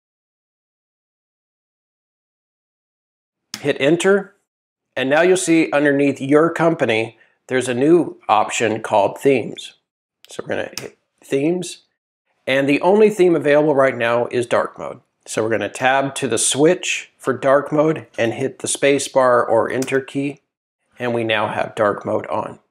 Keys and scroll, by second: 3.5 shift+Return, 7.6 Tab, 10.7 Return, 15.8 Tab.